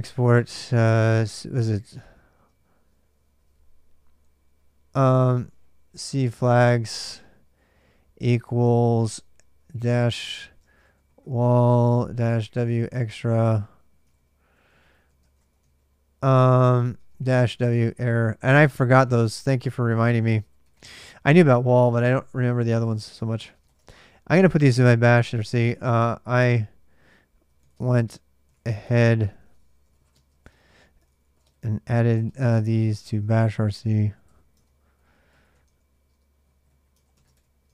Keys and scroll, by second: 0.0-2.3 typing, 4.8-7.2 typing, 9.4-20.6 typing, 13.9 ctrl+[, 13.9 ctrl+h, 19.6 ctrl+h, 21.7-37.7 typing, 36.8 ctrl+[, 37.5 ctrl+[.